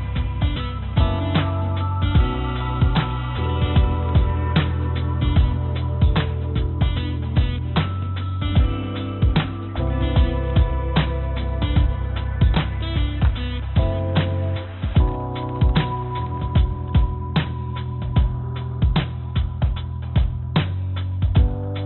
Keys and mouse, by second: 1.5 click, 2.3 g, 5.6 click, 5.7-6.8 drag, 7.7 shift+d, 15.5 shift+d, 19.9 shift+d.